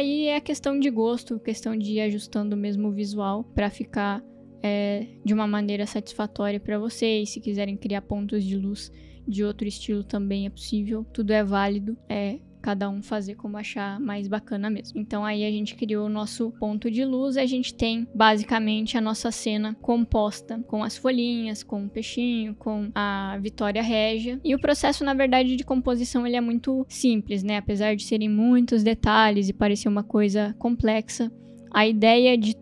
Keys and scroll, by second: 18.1 space.